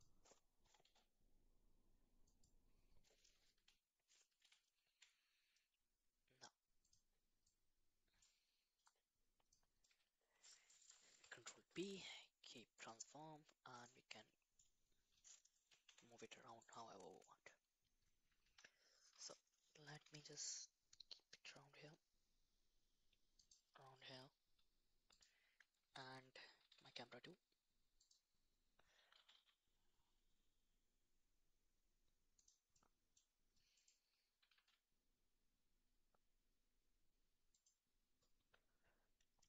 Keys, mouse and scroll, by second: 0.6 s, 3.6 KP_7, 4.4 s, 7.5-9.5 drag, 11.1 ctrl+p, 13.7-14.1 drag, 14.1 middle click, 15.9 g, 17.2 middle click, 18.5 KP_1, 19.8 g, 25.1 click, 26.6 g, 29.0 g, 33.8 click, 34.4 r.